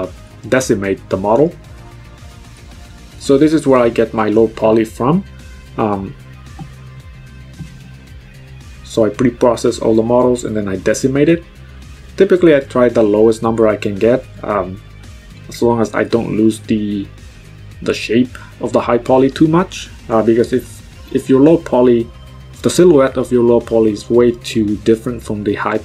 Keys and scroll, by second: 7.0 ctrl+z, 14.1 ctrl+z, 16.6 KP_5, 16.9 Return.